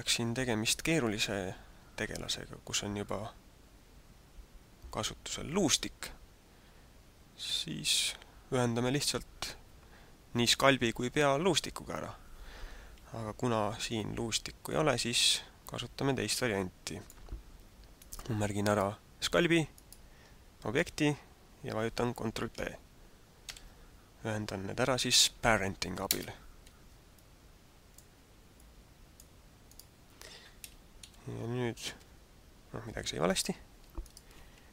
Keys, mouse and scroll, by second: 13.9 middle click, 17.9 right click, 18.7 right click, 19.8 right click, 23.5 ctrl+p, 27.3 middle click, 28.6 click, 29.6 right click, 31.0 g, 33.2 right click, 34.0 shift+right click.